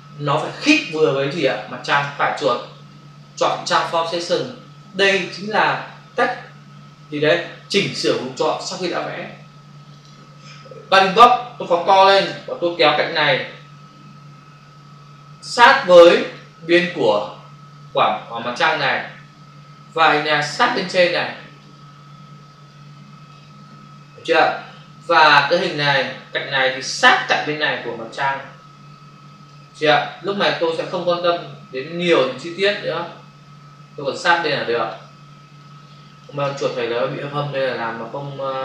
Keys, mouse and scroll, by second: 1.9 right click, 9.9 click, 11.0 ctrl+click, 13.1 click, 16.7 space, 20.2 click, 22.7 click, 24.3 space, 27.4 click, 30.7 click, 34.2 space, 37.6 click.